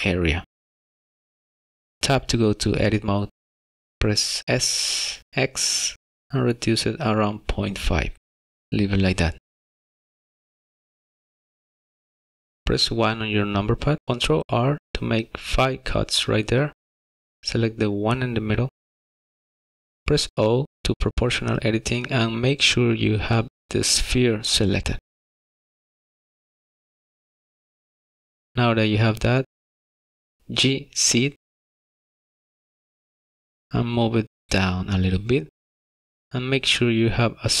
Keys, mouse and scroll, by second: 2.3 Tab, 4.0 x, 12.6 KP_1, 14.4 ctrl+r, 16.9 1, 20.1 o, 29.7 z.